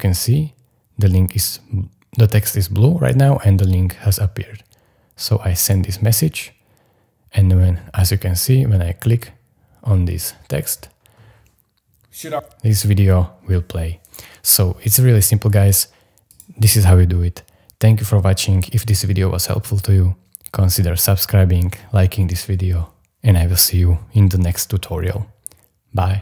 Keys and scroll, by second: 12.3 m.